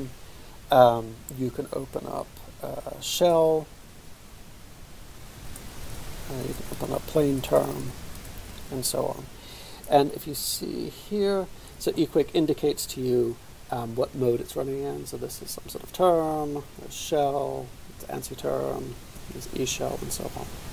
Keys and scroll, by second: 3.7-4.9 typing, 5.6 Return, 6.5 ctrl+alt++, 6.6-8.5 typing, 15.8 ctrl+{, 16.9 ctrl+{, 18.5 ctrl+{, 19.2 ctrl+{, 19.6 ctrl+{, 20.0 ctrl+{.